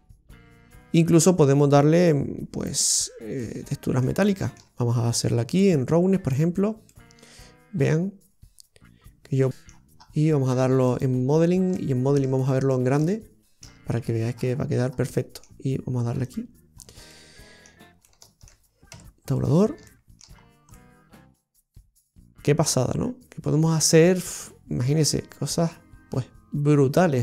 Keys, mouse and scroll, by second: 3.3 middle click, 4.5 shift+middle click, 5.6 click, 6.8 middle click, 6.8 scroll down 2, 9.9 scroll down 1, 10.8 click, 10.8 scroll down 1, 11.7 shift+middle click, 12.3 middle click, 13.0 middle click, 13.8-14.4 scroll down 5, 15.1 middle click, 15.1-16.1 scroll down 2, 16.3 click, 16.7-17.0 scroll down 2, 17.0 middle click, 17.9 middle click, 18.9 Tab, 19.3 right click, 19.8 shift+middle click, 20.3 scroll up 2, 20.7 middle click.